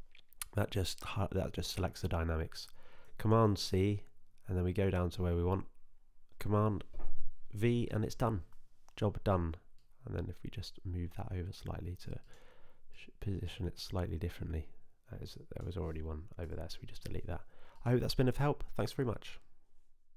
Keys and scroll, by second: 4.4 super+c, 6.3 BackSpace, 6.8 super+v, 17.2 Delete.